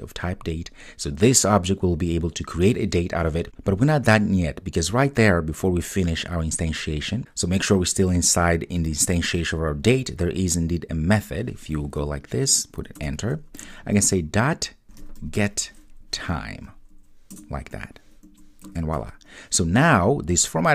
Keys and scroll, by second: 17.3 Return, 17.5 Return.